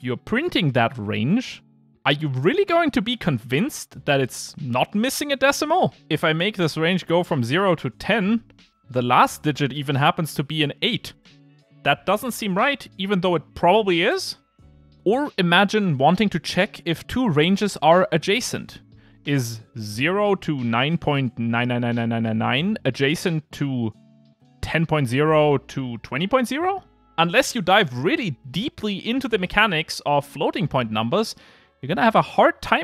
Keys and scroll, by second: 0.7 Return, 1.9 Return, 3.1 ctrl+r, 8.1 ctrl+r.